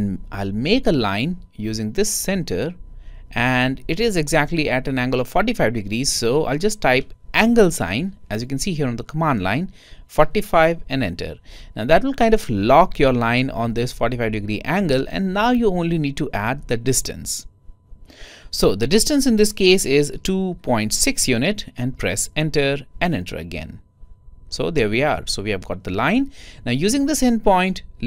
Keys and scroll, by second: 21.5-22.2 typing, 23.5-24.4 typing.